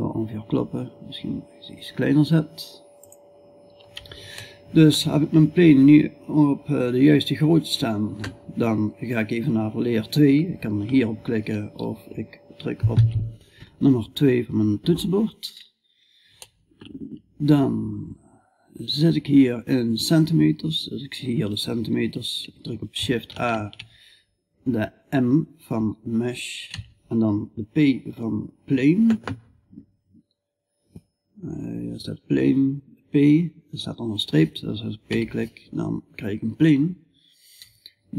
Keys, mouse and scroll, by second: 3.8-6.5 middle drag, 12.4 2, 22.8 shift+a, 36.4-38.1 middle drag.